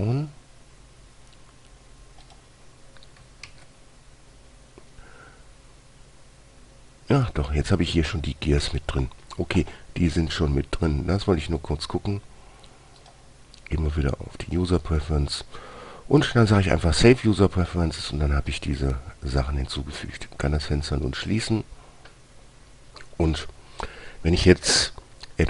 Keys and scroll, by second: 3.8 shift+a, 8.9 Escape.